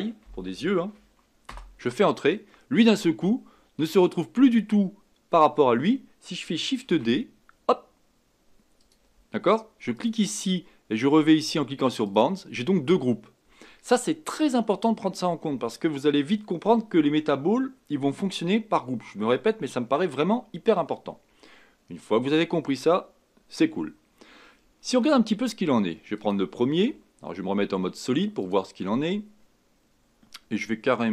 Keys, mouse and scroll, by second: 9.9 click, 12.0 click, 26.2 click, 28.4 click, 29.4-30.0 scroll up 2.